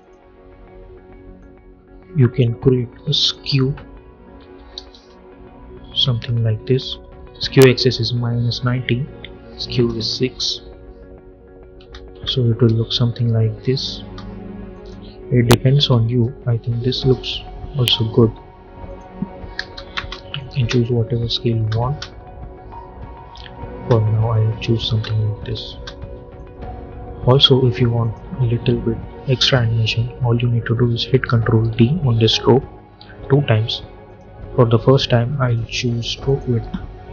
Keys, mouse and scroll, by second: 4.3 -, 4.9 Return, 9.6 space, 11.7 space, 14.6 click, 15.5 j, 18.7 click, 19.8 Return, 20.5 space, 23.6 space, 26.3-27.9 drag, 30.6 ctrl+Num_Lock, 30.6 click, 31.5 ctrl+d, 32.9 ctrl+d, 34.0 click, 36.2 click.